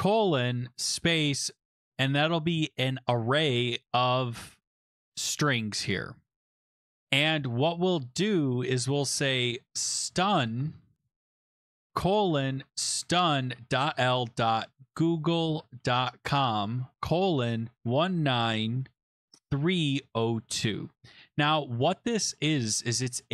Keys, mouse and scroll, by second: 0.0-0.6 typing, 1.7-4.2 typing, 6.7 click, 7.8 click, 8.3 click, 9.5-20.5 typing.